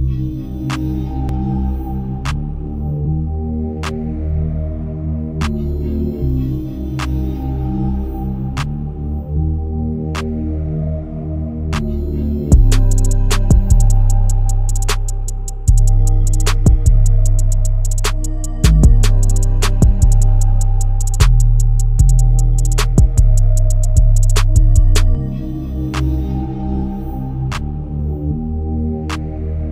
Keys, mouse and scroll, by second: 0.1-0.6 scroll down 1, 0.6 click, 1.2 right click, 1.4-1.8 scroll down 1, 1.8 click, 2.7 scroll up 1, 2.9 click, 5.5 scroll up 1, 6.0-6.5 scroll down 1, 6.5 click, 6.8 scroll down 1, 7.0 right click, 7.6 click, 7.9-8.6 scroll up 1, 8.6 click, 9.0-9.8 scroll up 1, 9.8 ctrl+click, 10.6 space, 10.9 click, 10.9 click, 11.9 scroll down 1, 12.1-12.6 scroll up 1, 12.6 click, 13.3-14.0 scroll down 1, 14.0 click, 14.3-15.0 scroll up 1, 15.0 click, 15.0 click, 15.2-15.5 scroll down 1, 15.5-16.4 scroll up 1, 17.6-24.3 drag, 24.3-24.6 scroll up 1, 24.8-27.1 drag, 27.1 ctrl+z, 27.8-29.7 drag.